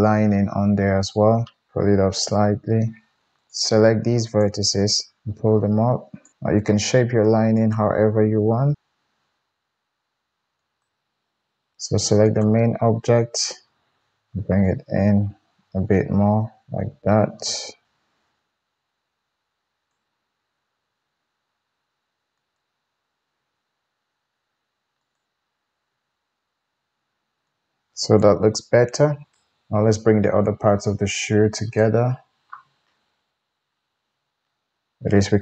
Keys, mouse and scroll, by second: 2.2 g, 3.4 shift+click, 4.2 shift+click, 5.2 g, 7.6 click, 8.2 g, 8.5-12.2 middle drag, 12.2 click, 12.4-22.3 middle drag, 14.0 Tab, 14.0 g, 17.8 Tab, 18.4 g, 20.7 g, 22.3 click, 22.5-25.0 middle drag, 23.3 g, 25.0 click, 25.1-31.5 middle drag, 25.8 g, 28.3 Tab, 31.5 click, 31.7-34.3 middle drag, 34.3 Tab.